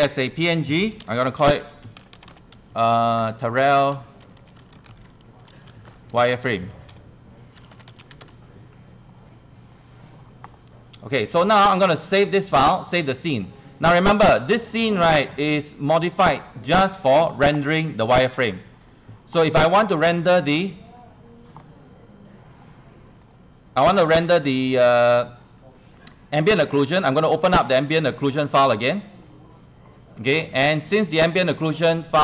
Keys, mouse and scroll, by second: 1.2-2.3 typing, 3.4-8.8 typing, 9.7-32.2 drag.